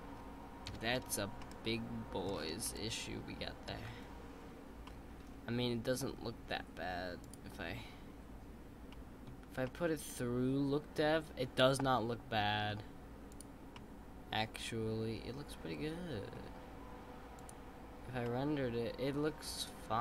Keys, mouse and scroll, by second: 0.7 KP_5, 1.4-2.2 middle drag, 2.2-2.6 scroll up 2, 2.6-3.8 middle drag, 3.8-4.8 scroll down 2, 4.8-8.1 middle drag, 8.1 click, 8.9-12.6 middle drag, 13.3 click, 13.7-16.7 middle drag, 17.5 click, 18.2-20.0 middle drag.